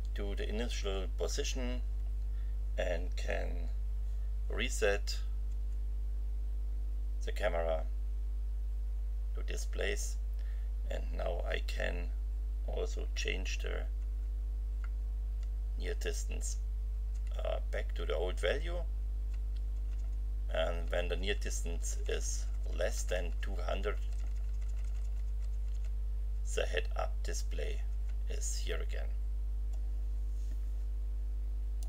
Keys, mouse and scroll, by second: 5.5 F11, 14.0 F5, 14.8 F5, 17.1 F6, 26.3 F6, 27.5 F6, 31.8 click.